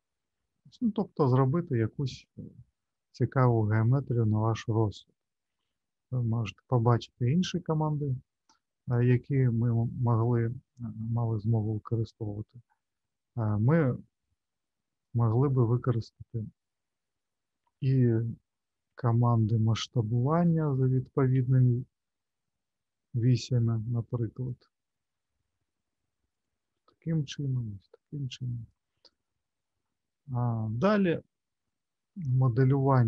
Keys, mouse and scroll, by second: 0.7 middle click, 14.2 click, 27.4 click, 29.0 click, 30.2 middle click, 30.8 scroll down 2, 31.6 middle click, 32.3-33.0 scroll down 2.